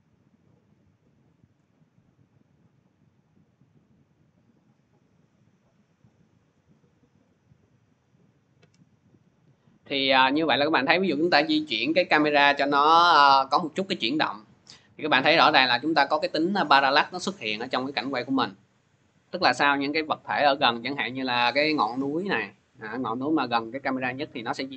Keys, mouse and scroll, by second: 0.0 scroll, 1.3 shift+click, 3.2-5.5 drag, 7.8 click, 8.2 scroll.